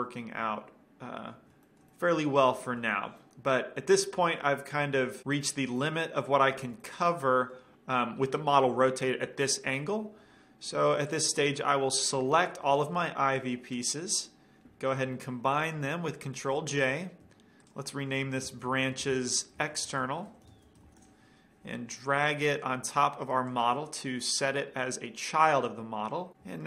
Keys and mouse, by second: 0.6-1.6 middle drag, 1.9-5.3 middle drag, 5.5-9.9 middle drag, 11.3-12.6 drag, 13.1-14.4 middle drag, 13.3 b, 16.9 ctrl+j, 17.9 click, 22.7-24.6 drag, 26.4-26.6 drag.